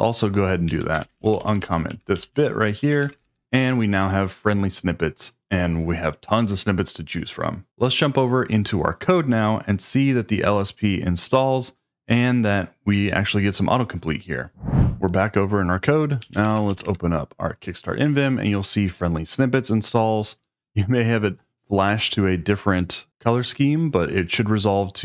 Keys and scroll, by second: 0.4-3.6 typing, 16.0-17.2 typing.